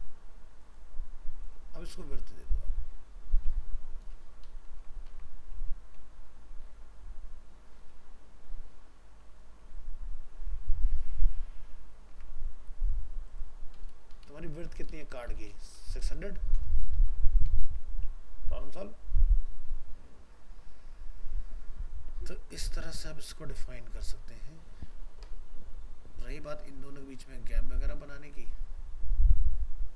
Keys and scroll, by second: 4.7 ctrl+s, 5.2 alt+Tab, 12.1 alt+Tab, 17.3 ctrl+s, 17.7 alt+Tab.